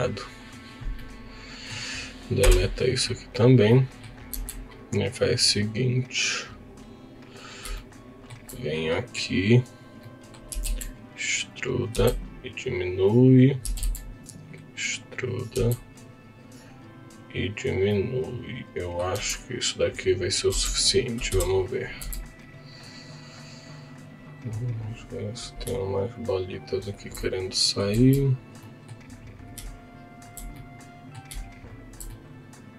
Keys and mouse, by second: 0.9 middle click, 2.4 Delete, 3.7 middle click, 4.3 2, 4.7 click, 5.0 click, 10.0 middle click, 10.5 e, 10.6 z, 11.5 click, 11.9 s, 13.3 click, 13.8 e, 13.8 z, 15.5 s, 17.6 click, 17.9-19.0 middle drag, 19.3 s, 20.5 Tab, 21.3 KP_1, 22.0 z, 24.9 click, 26.1 shift+click, 27.2 middle click, 28.1 z, 28.6 middle click, 30.6 middle click, 32.1 middle click.